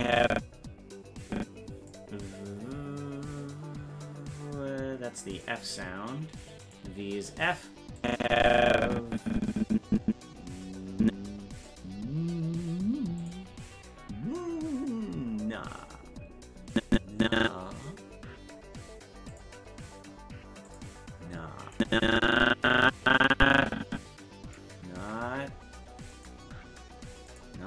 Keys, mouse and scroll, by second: 5.3 click, 6.6 click, 8.0-11.7 drag, 13.2 click, 14.8 click, 16.7-17.9 drag, 19.3 click, 20.7 click, 21.8-24.6 drag, 26.1 click, 27.3 click.